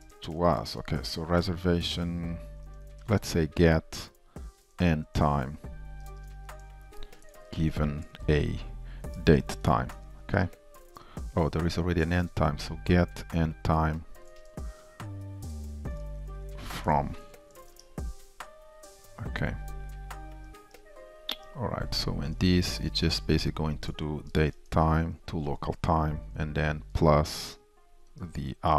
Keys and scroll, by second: 10.0 Return, 17.8 alt+Return, 20.8 Return, 23.3 ctrl+shift+Left, 24.8 Return, 28.1 Return.